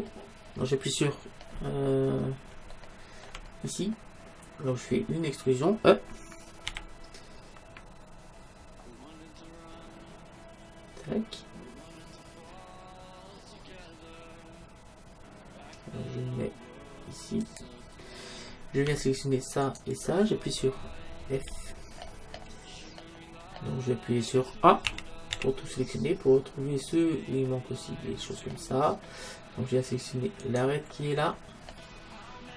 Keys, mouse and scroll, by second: 1.5-4.9 middle drag, 6.7 e, 17.6-19.4 drag, 19.7-21.4 right drag, 21.4 f, 22.0-23.5 middle drag, 24.8 f, 24.9 a, 25.4 a, 27.4 middle click, 30.5-32.3 right drag.